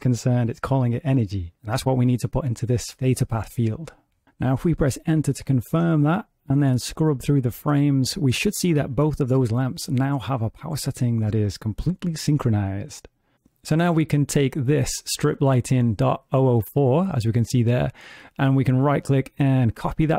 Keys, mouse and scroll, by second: 5.7 click, 12.5 click, 18.9 right click.